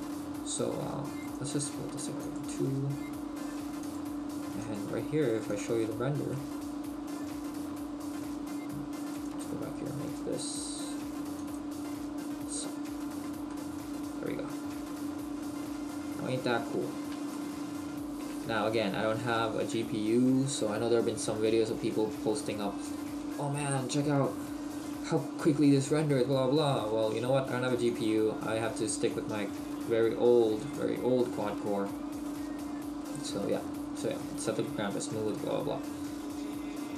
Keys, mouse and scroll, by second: 1.2 right click, 4.6 click, 6.3 middle click, 13.8 middle click, 15.0 scroll up 1, 16.3 middle click, 17.4 shift+middle click, 27.0-27.9 scroll up 1, 27.9 click, 30.1-30.6 scroll down 1, 30.6 click.